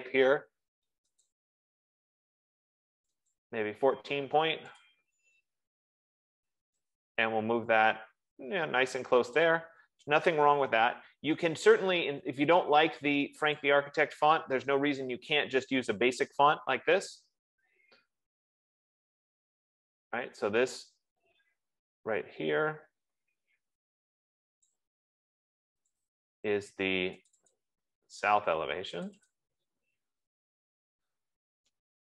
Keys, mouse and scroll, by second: 2.0 click, 3.0 click, 4.0 click, 5.3 click, 9.6 click, 11.3 ctrl+c, 14.0 click, 15.3 BackSpace, 17.7 ctrl+v, 25.8 click, 26.3 click, 27.0 click, 28.0 click, 29.7 click, 30.2 click, 30.7 typing, 31.7-32.0 typing.